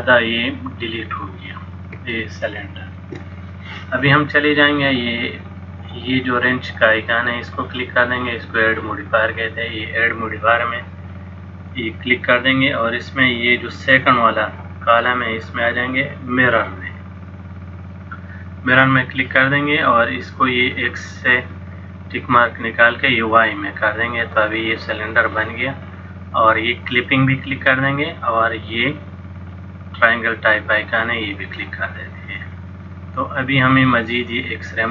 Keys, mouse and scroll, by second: 2.3 shift+middle click, 7.4 click, 9.6 click, 11.8 click, 21.4 click, 23.2 click, 27.2 click, 29.5 click.